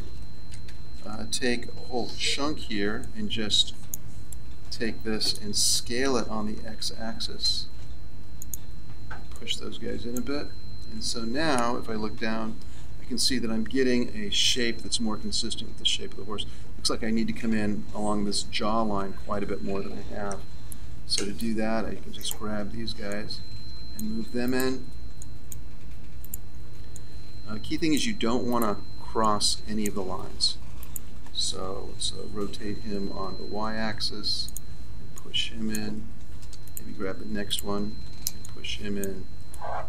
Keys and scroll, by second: 0.4 z, 2.0 a, 8.3 s, 10.8 Tab, 12.1 KP_1, 18.9 Tab, 20.2 z, 32.3 r.